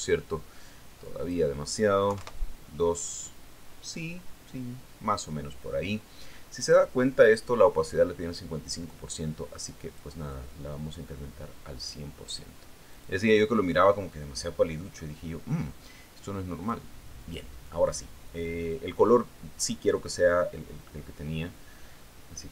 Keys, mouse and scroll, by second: 2.6 click, 3.6 KP_2, 3.7 KP_Enter, 11.2 click, 11.8-13.6 drag, 14.4 click, 18.1 click.